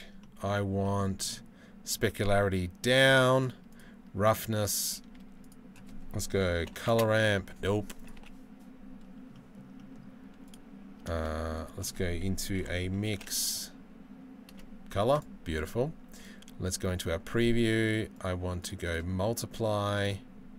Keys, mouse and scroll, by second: 9.0 Delete, 9.0-20.5 middle drag.